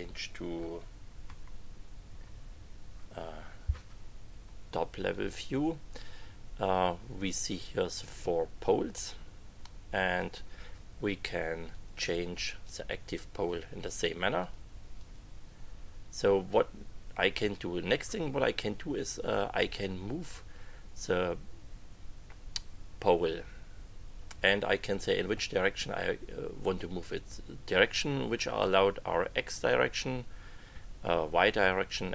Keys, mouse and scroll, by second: 1.2 KP_Subtract, 5.1-6.4 drag, 11.7 click, 12.6 click, 13.4 click, 14.4 click, 14.9 click.